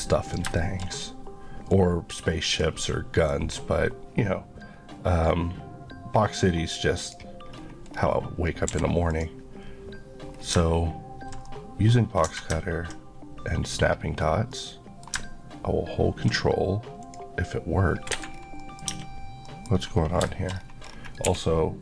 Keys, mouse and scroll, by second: 0.3 click, 0.6 shift+middle click, 0.9 shift+scroll up 2, 1.7 click, 2.7 middle click, 3.4-5.1 scroll up 1, 7.0 click, 7.5-8.1 scroll up 2, 8.5 scroll up 1, 8.7 q, 9.1 click, 10.2 scroll down 1, 11.5 middle click, 14.2 scroll down 1, 14.5 middle click, 17.0 click, 18.1 Escape, 18.3 scroll down 1, 18.6 middle click, 19.0 Tab, 19.5 middle click, 19.7-20.9 scroll up 4, 21.3 scroll up 1, 21.3 1.